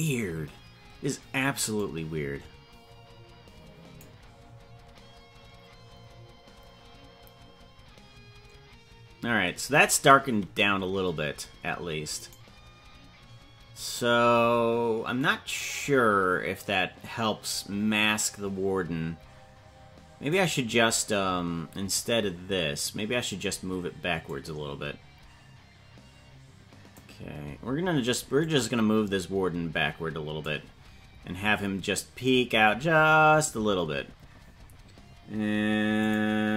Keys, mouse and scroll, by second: 1.7-4.4 drag, 12.4 right click, 20.5 right click, 24.2-27.5 drag, 28.8-30.9 drag, 35.9 click.